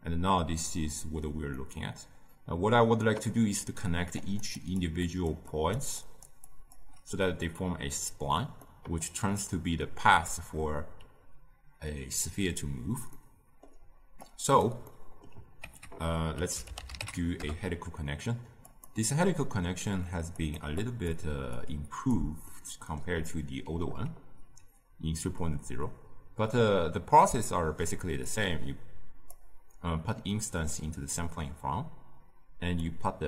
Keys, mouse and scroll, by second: 4.1-5.7 drag, 5.7 d, 5.9-17.4 drag, 17.4 ctrl+a, 29.4 click.